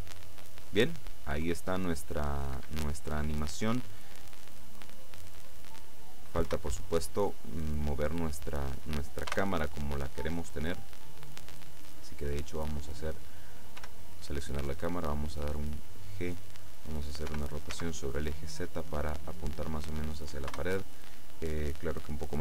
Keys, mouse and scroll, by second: 2.6 Escape, 6.6 KP_0, 9.4 KP_0, 10.3-10.8 scroll down 2, 13.0 right click, 13.8 g, 16.2 click, 17.4 r, 17.8 z, 19.6 click, 20.6 KP_0.